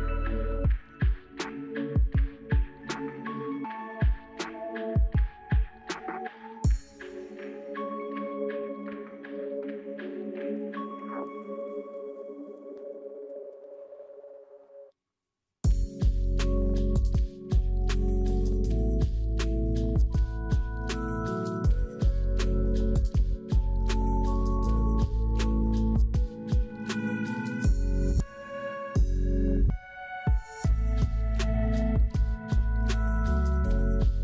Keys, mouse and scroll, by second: 10.8 double click, 11.1 double click, 13.3 0, 13.5 Return.